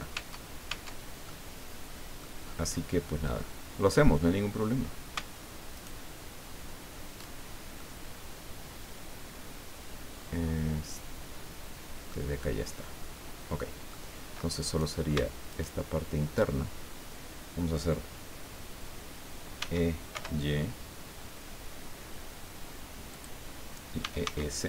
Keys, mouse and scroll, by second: 0.1 Tab, 1.3-2.4 drag, 2.4-3.0 scroll up 2, 5.7 alt+shift+right click, 7.4 alt+shift+scroll down 3, 7.8-12.3 drag, 12.4-12.7 scroll up 2, 13.3-13.7 scroll down 2, 13.7 click, 14.7 right click, 15.5 alt+shift+right click, 19.6 e, 20.1 y, 23.1 click, 24.0 e, 24.3 s.